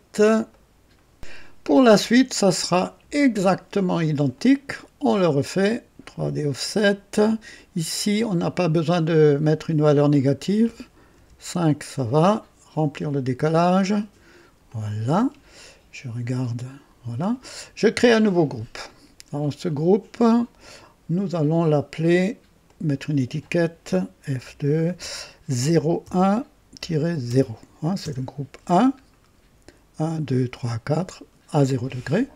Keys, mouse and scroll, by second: 0.5 right click, 1.1 click, 2.4 click, 4.3 click, 5.5 click, 6.7-8.4 drag, 10.0 click, 11.1 KP_5, 11.1 KP_5, 12.9 click, 14.0 click, 14.7 click, 18.2 click, 22.6 click, 24.3 F2, 25.5 KP_0, 26.0 KP_1, 26.7 KP_Subtract, 27.2 KP_0, 28.0 KP_Enter, 29.0-32.1 scroll down 2.